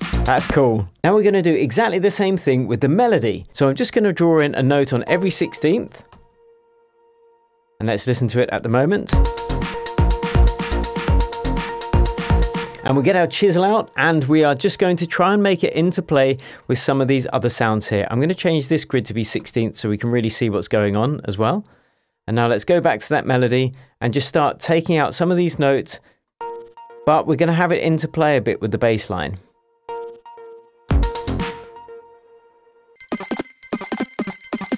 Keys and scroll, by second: 0.5 space, 6.1 super+d, 7.9 super+d, 9.1 super+space, 12.6 space, 18.1 super+1, 18.7 super+2, 26.7 BackSpace, 30.4 BackSpace, 30.9 space, 32.9 BackSpace, 33.1 space, 33.7 space.